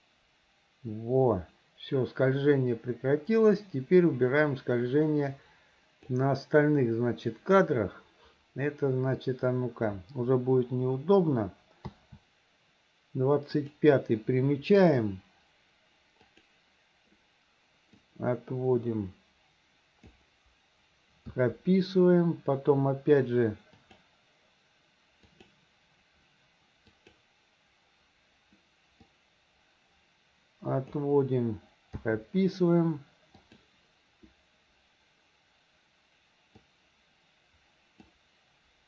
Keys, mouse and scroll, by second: 11.9 a, 13.6 click, 16.4 click, 18.1-20.2 drag, 21.4 i, 23.9 click, 25.4 click, 26.9 click, 29.2-31.0 drag, 32.0 i, 33.4 click, 36.6-38.1 drag.